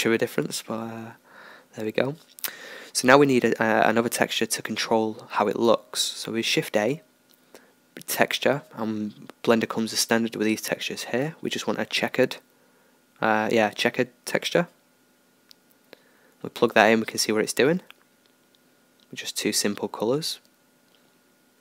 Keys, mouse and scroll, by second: 13.8-20.0 drag, 21.2-21.6 drag.